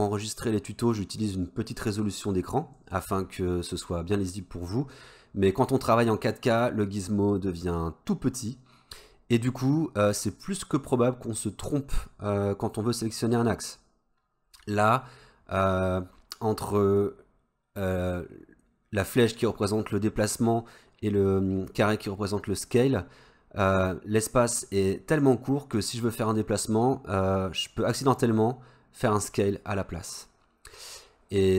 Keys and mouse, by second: 27.7-31.5 drag.